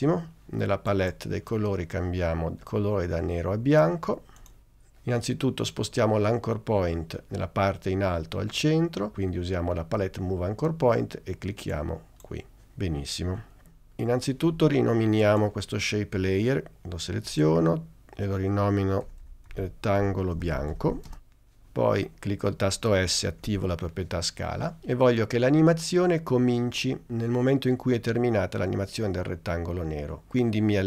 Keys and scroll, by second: 17.4 Return, 18.9-21.6 typing, 23.5 s.